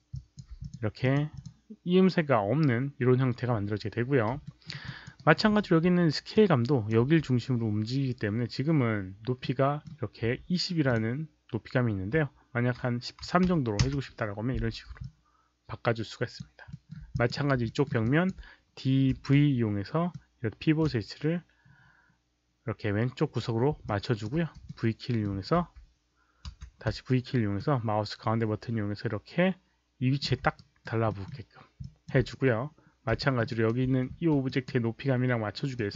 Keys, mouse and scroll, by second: 0.0 alt+drag, 0.5 click, 0.9 click, 1.3 click, 4.4 alt+middle click, 4.8 alt+click, 5.1 alt+right click, 5.6 r, 6.3 click, 7.0 z, 9.3-9.8 middle drag, 9.8 alt+right click, 9.8 r, 10.8 click, 13.2 KP_1, 13.4 KP_3, 13.8 Return, 14.9-16.3 alt+drag, 16.6 alt+middle click, 17.0 click, 17.6 alt+middle click, 17.9 alt+drag, 18.8-20.1 typing, 20.1 Return, 20.1-20.7 alt+middle drag, 20.1 alt+click, 23.8 alt+click, 23.9-26.9 typing, 24.6-25.2 middle drag, 27.5-30.1 middle drag, 30.5 alt+right click, 31.0 alt+middle click, 31.7 alt+click, 33.1 alt+middle click, 33.2-33.9 typing, 33.4 alt+right click, 33.4 alt+click, 34.4 drag, 35.7 click.